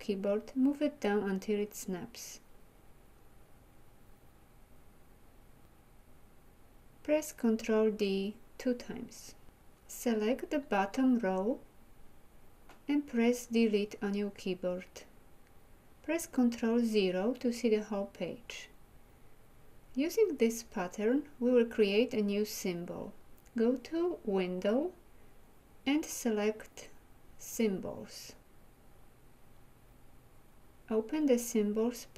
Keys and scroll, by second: 8.4 ctrl+d, 12.5 Delete.